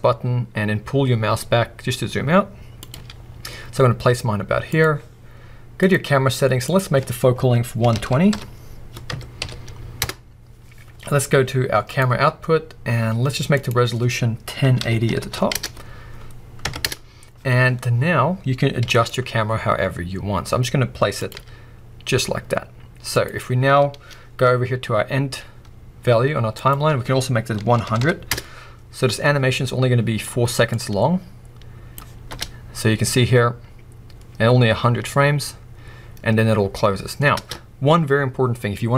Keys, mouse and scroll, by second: 2.8 click, 2.9 g, 4.8 click, 5.8-13.1 drag, 10.0 Return, 13.5-21.3 drag, 16.9 Return, 17.9-18.8 scroll down 2, 18.8 g, 23.2 click, 23.4-24.1 scroll up 2, 24.1-26.5 scroll up 1, 26.5-29.5 drag, 28.0 0, 28.4 Return, 29.5-30.7 middle drag, 30.7-31.3 drag, 32.3 space, 38.6 space.